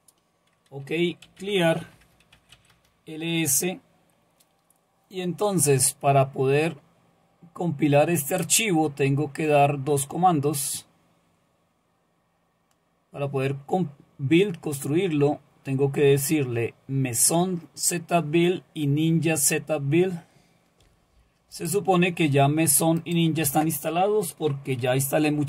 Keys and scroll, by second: 1.0-2.9 typing.